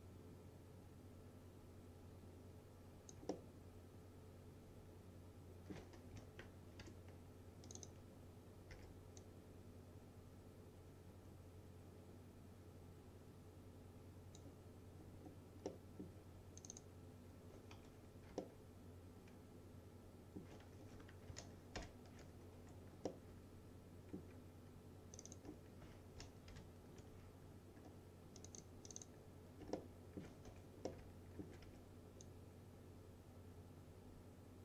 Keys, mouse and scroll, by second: 3.4-6.2 alt+middle drag, 6.2 F4, 6.5-6.9 scroll up 1, 6.9 2, 7.7 click, 8.8 w, 9.3-14.5 drag, 14.7-15.1 scroll up 1, 15.7-16.3 middle click, 16.7 click, 17.8 F3, 18.5-20.6 alt+middle drag, 20.9 F3, 21.8 ctrl+BackSpace, 22.6 F3, 23.1-25.2 middle drag, 25.2 click, 26.6 ctrl+BackSpace, 27.6 scroll down 1, 28.4 click, 29.8-30.1 alt+scroll up 1, 30.1-30.4 alt+middle click, 30.5 F3, 30.9-31.5 middle click, 31.7 w, 32.3-34.6 drag.